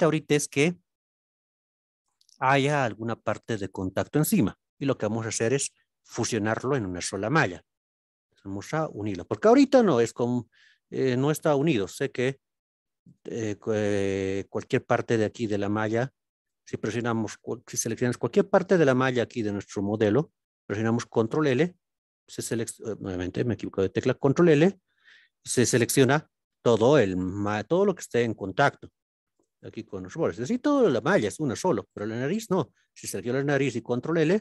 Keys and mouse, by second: 1.5 click, 6.5-9.2 middle drag, 11.3 alt+z, 11.9 middle click, 13.0 click, 14.9 click, 16.5 click, 17.7 middle click, 18.8 click, 21.4 ctrl+l, 27.7 click, 29.4-31.7 drag, 32.5 click, 34.1 ctrl+l.